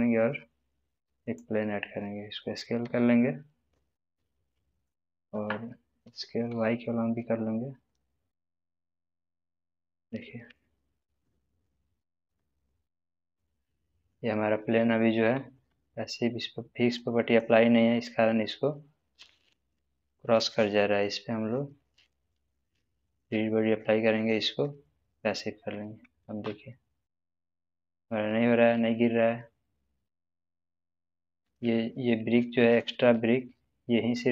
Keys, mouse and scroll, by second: 1.2 click, 1.2 click, 2.8 s, 4.7 click, 6.0 s, 6.5 y, 9.1 click, 10.0 scroll down 1, 10.3-11.8 middle drag, 12.2 space, 13.6-14.2 middle drag, 15.5 space, 16.9-17.6 drag, 26.2 space, 31.6-32.8 middle drag.